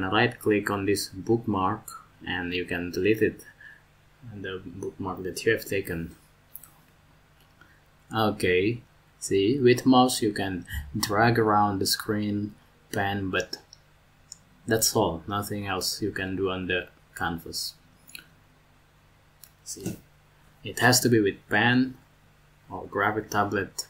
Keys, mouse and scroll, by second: 1.7 right click, 5.6 right click.